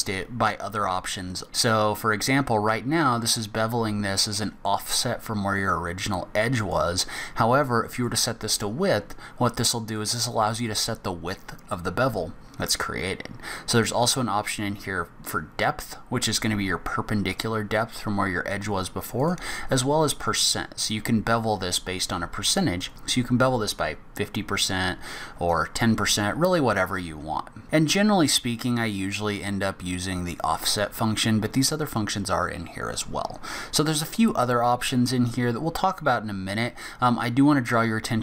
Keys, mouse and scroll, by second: 5.7 click, 7.9 click, 9.1 click, 19.2 click, 20.1 click, 27.6 click.